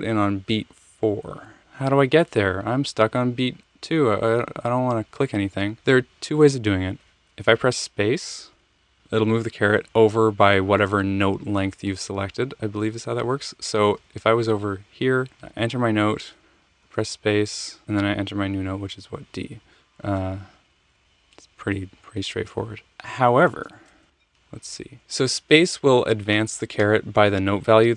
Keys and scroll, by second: 8.5 space, 13.8 Left, 13.9 Left, 14.1 Left, 14.2 Left, 16.4 space, 16.8 space, 17.6 space, 19.6 d, 20.7 alt+super+Down, 24.1 super+z, 24.2 super+z.